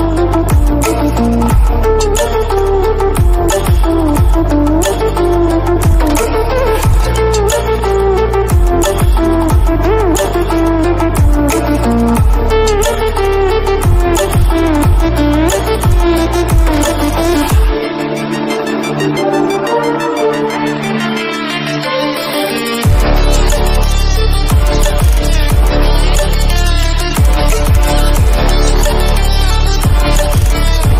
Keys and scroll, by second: 0.3 ctrl+=, 15.4 ctrl+-.